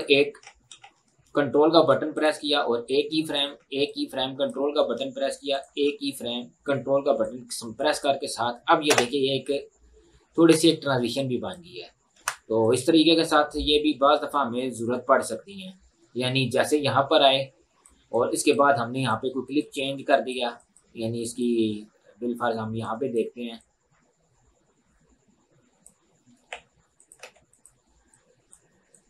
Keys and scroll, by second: 8.9 space, 10.6 space, 12.2 Delete, 26.5-27.7 typing.